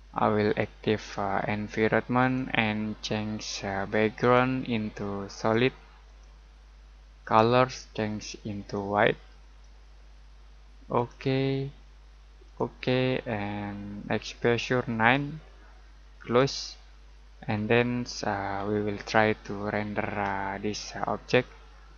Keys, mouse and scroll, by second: 16.2 click, 17.2 scroll down 1, 17.5-18.9 scroll up 1, 18.9-19.3 scroll down 1, 19.3-19.8 scroll up 1, 19.8-20.1 scroll down 1, 20.1 scroll up 1, 20.8 middle click.